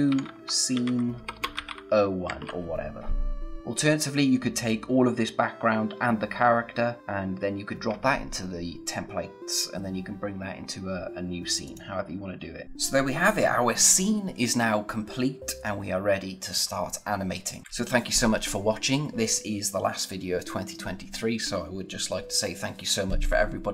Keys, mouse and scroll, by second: 0.0-2.4 typing, 3.6-5.7 scroll up 1, 11.7 click, 17.6 click.